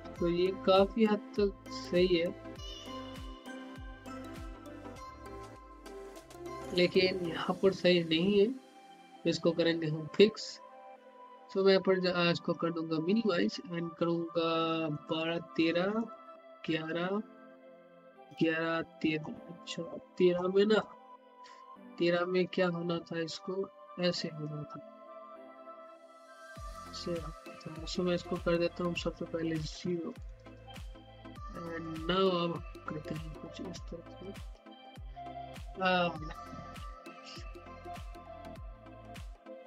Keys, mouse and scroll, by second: 12.3 click, 21.1-21.9 scroll down 1, 22.1 alt+middle click, 23.0-30.0 drag, 30.0 ctrl+x, 32.4-34.7 drag, 34.7-35.4 typing, 36.5 typing, 37.4 click, 38.3-38.9 typing.